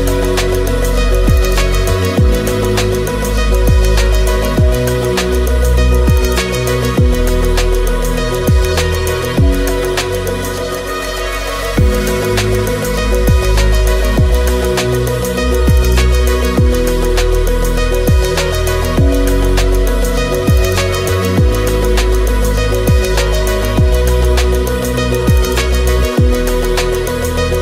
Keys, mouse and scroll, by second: 0.5 alt+d, 0.7 shift+s, 0.9 KP_Decimal, 2.1 shift+click, 8.0 ctrl+shift+middle click, 8.4 shift+middle click, 8.5 shift+click, 8.7 click, 11.8 shift+middle click, 12.2 alt+d, 12.6 shift+s, 12.9 KP_Decimal, 13.2 click, 13.8 shift+click, 14.1 shift+s, 15.2 alt+d, 15.5 shift+click, 15.8 shift+1, 16.6 click, 17.3 click, 17.7 alt+s, 18.9 s, 19.8 ctrl+click, 20.1 alt+d, 20.4 click, 20.6 shift+click, 20.7 shift+s, 21.5 shift+click, 22.0 shift+click, 26.0 shift+click, 27.3 click.